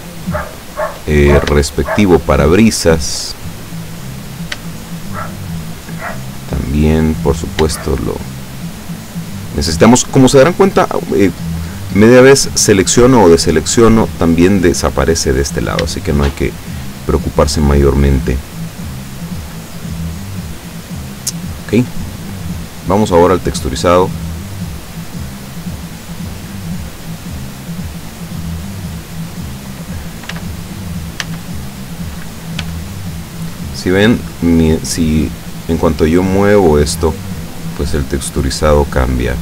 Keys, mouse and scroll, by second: 0.3 shift+right click, 0.7 shift+right click, 1.4 scroll down 1, 1.8-2.7 shift+middle drag, 3.3-4.8 shift+middle drag, 5.1 shift+right click, 5.8 shift+right click, 6.6 shift+middle click, 7.5 scroll up 2, 7.9 shift+middle click, 9.3 shift+right click, 16.0-17.0 shift+middle drag, 19.7-21.2 shift+middle drag, 21.4 shift+middle click, 22.9 click, 23.9 click, 24.7-25.1 scroll down 1, 26.5-27.0 scroll up 2, 27.4 scroll down 2, 29.2 right click, 30.4 a, 31.3 a, 32.7 g.